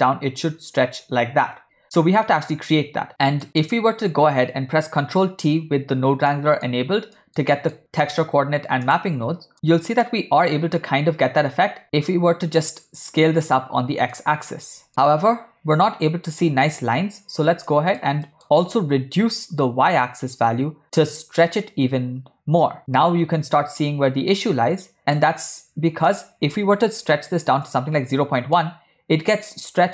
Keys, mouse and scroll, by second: 2.0-3.1 ctrl+drag, 3.1 middle click, 3.1 w, 3.6 click, 5.2 ctrl+t, 6.4 middle click, 7.3 ctrl+middle click, 7.6 middle click, 8.1 drag, 8.9 click, 10.1-13.5 drag, 14.2-14.7 middle drag, 14.9 shift+click, 17.8 ctrl+middle click, 19.5-25.3 shift+drag, 26.2-27.6 drag, 28.7-29.3 middle drag.